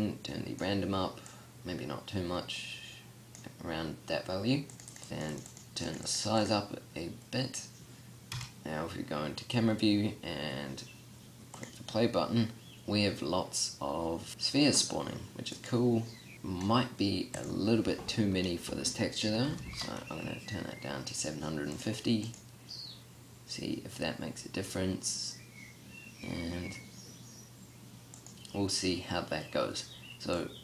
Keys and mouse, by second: 8.3 KP_0, 15.5 click, 16.0 middle click, 16.2 click, 17.3-19.3 drag, 21.7-22.7 drag.